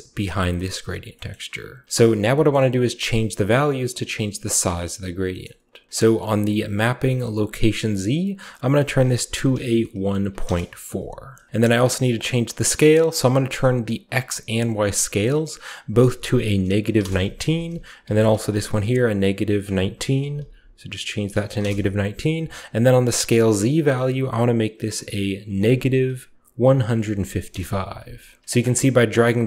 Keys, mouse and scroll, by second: 0.1 click, 0.6-1.8 scroll up 1, 2.0-2.7 typing, 2.4-4.2 middle drag, 2.5-4.2 scroll up 1, 4.2 scroll down 1, 4.5 middle click, 5.4 middle click, 5.4-5.9 scroll up 1, 8.8-10.0 drag, 9.3-10.3 typing, 10.4 Return, 11.5 middle click, 11.5-13.2 scroll up 1, 12.0-13.2 middle drag, 14.7 click, 15.2-16.4 drag, 16.0-18.5 typing, 16.9 Return, 19.0 click, 20.1-21.5 typing, 23.6 click, 25.3-27.0 typing, 27.4 Return, 28.4-29.4 shift+middle drag, 28.8-29.4 typing, 29.3-29.4 shift+drag.